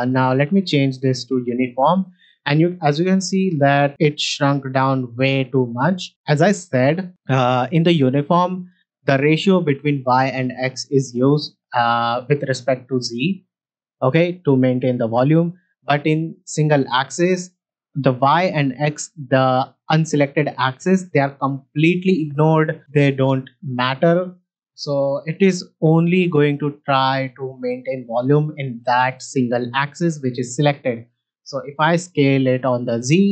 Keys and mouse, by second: 0.1-1.5 drag, 2.7 middle drag, 13.2 middle drag, 15.5-16.6 drag, 17.1 middle click, 22.8 s, 22.9 y, 24.2 click, 31.8 s, 32.0 z.